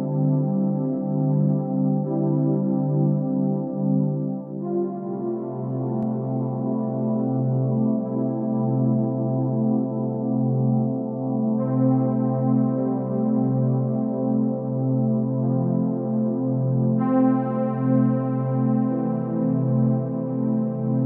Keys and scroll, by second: 17.1 ctrl+j.